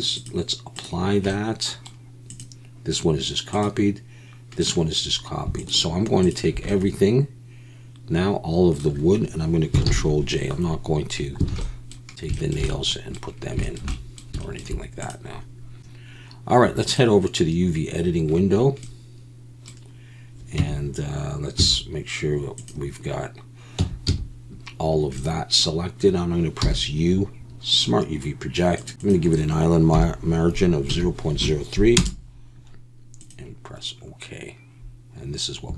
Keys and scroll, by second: 9.9 ctrl+j, 11.5 alt+a.